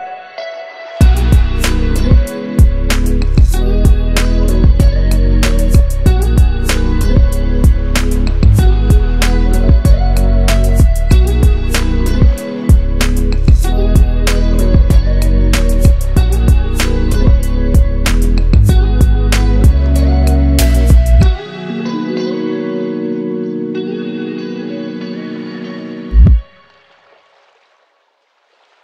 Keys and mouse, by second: 8.0-12.2 middle drag, 12.6 click, 18.7-21.5 drag, 21.5-24.6 ctrl+middle drag, 26.2-28.5 middle drag, 28.5-28.8 drag.